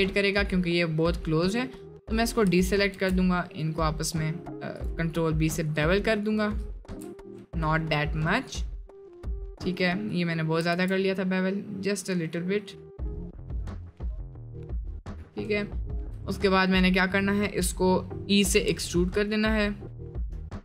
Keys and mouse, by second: 1.3 middle click, 2.9 ctrl+b, 5.1-6.4 middle drag, 6.9 ctrl+z, 7.2 middle click, 7.8 middle click, 8.6 middle click, 9.4 middle click, 10.1 middle click, 10.7 ctrl+b, 13.6 middle click, 14.3 middle click, 14.8 middle click, 15.5 middle click, 15.8 shift+middle click, 18.7 e.